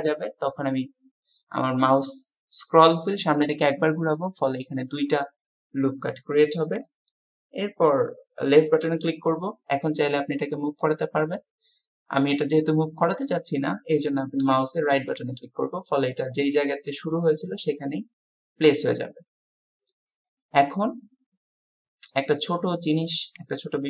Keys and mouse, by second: 20.1-22.4 drag.